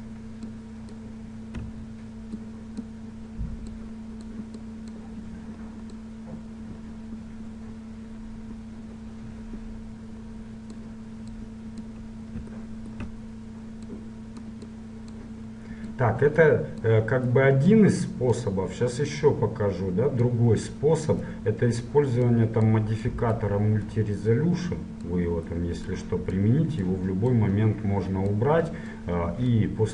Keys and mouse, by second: 2.1-8.1 drag, 11.5-13.4 drag, 13.4 middle click, 14.1-29.9 drag.